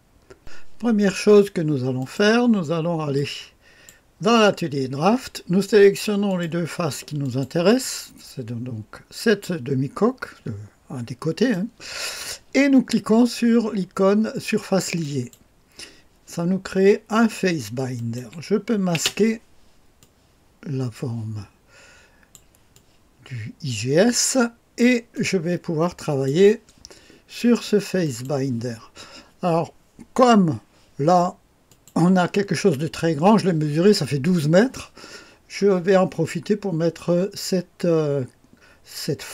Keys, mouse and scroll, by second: 0.4 click, 2.0 click, 3.1 click, 6.3 click, 7.2 ctrl+click, 7.8-11.5 drag, 15.0 click, 17.9 click, 19.0 space, 20.0-22.4 drag, 22.7-24.8 drag, 25.1-26.3 drag, 28.0 click, 31.7 click.